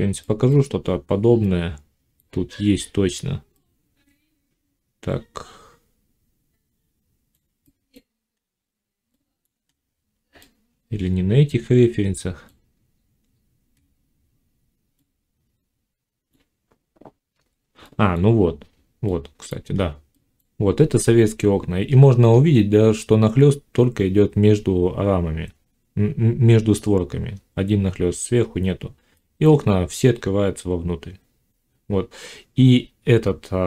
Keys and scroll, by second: 17.3 F9.